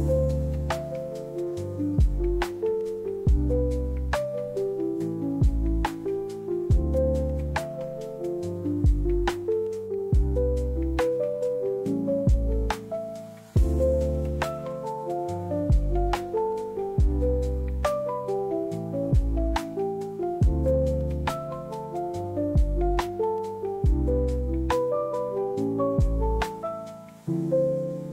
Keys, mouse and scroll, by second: 0.4-1.4 drag, 2.1 click, 2.6 space, 3.8 click, 4.7-6.6 drag, 6.7 click, 7.6-10.4 drag, 11.5-12.3 drag, 14.8-15.6 drag, 16.7-17.7 drag, 19.1 click, 20.3 click, 21.8 click, 22.7 click, 25.0 click, 26.0 click, 27.6-28.1 drag.